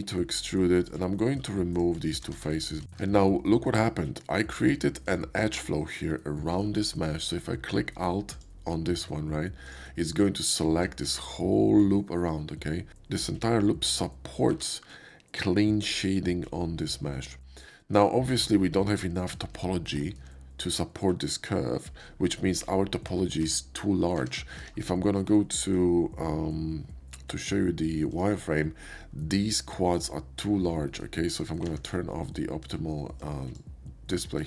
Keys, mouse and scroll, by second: 0.9 click, 1.7 middle click, 2.1 shift+middle click, 2.3 x, 3.0 Tab, 5.0 alt+click, 6.2 alt+middle click, 8.3 click, 9.6 click, 10.4 alt+click, 14.5 Tab, 17.4 middle click, 17.7 shift+middle click, 18.9 shift+middle click, 19.8 shift+middle click, 23.5 Tab, 24.2 Tab, 24.5 q, 24.7 Tab, 28.1 click, 28.8 middle click, 29.1-29.9 scroll up 1, 30.5 click, 30.9-31.6 scroll up 1, 32.6 ctrl+scroll up 1, 33.2-33.5 ctrl+scroll up 1, 34.4 ctrl+scroll up 1.